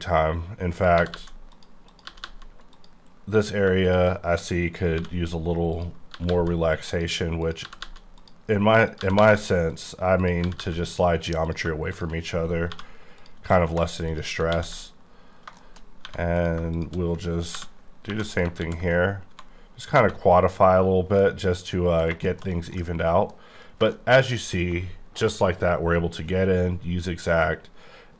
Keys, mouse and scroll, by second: 0.8 click, 1.1 g, 1.1 g, 1.5 click, 1.9 click, 2.1 g, 2.2 g, 2.7 click, 4.9 j, 5.7 click, 6.1 g, 6.3 g, 6.9 click, 7.4 click, 7.6 g, 7.8 g, 8.2 click, 8.9 click, 9.0 g, 9.2 g, 9.7 click, 10.2 click, 10.4 g, 10.6 g, 10.9 click, 11.5 click, 11.9 shift+click, 12.7 j, 13.2 click, 13.7 typing, 14.1 click, 14.5 ctrl+x, 15.2 scroll down 2, 15.6 shift+middle click, 16.0 1, 16.4 click, 17.5 j, 18.1 j, 18.3 click, 18.6 ctrl+x, 19.3 1, 20.7 scroll down 2, 21.2 middle click, 22.0-22.6 scroll down 5, 22.3 shift+middle click, 22.8 middle click.